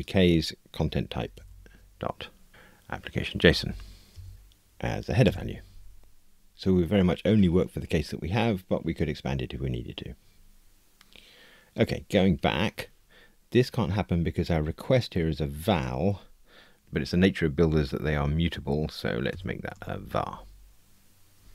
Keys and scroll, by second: 1.8 Return, 5.2 Return, 20.2 Escape.